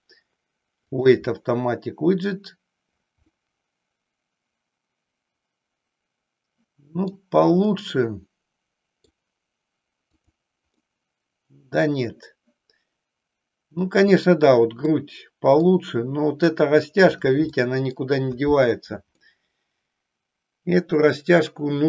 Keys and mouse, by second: 3.4-7.3 middle drag, 7.7-9.2 middle drag, 10.0 click, 10.7-14.0 middle drag, 14.9 middle click, 17.5 middle click, 19.2-21.8 middle drag.